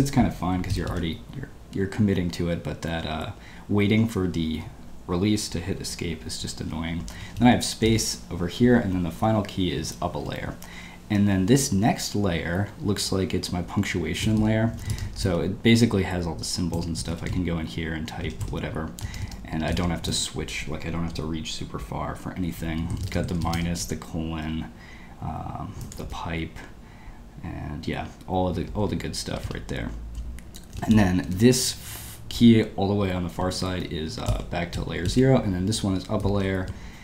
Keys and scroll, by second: 0.7 typing, 10.4-11.2 typing, 14.2-15.2 typing, 16.4-20.5 typing, 22.9 -, 26.0 shift+\, 28.8 Escape, 29.2-32.1 typing, 33.4-35.0 typing.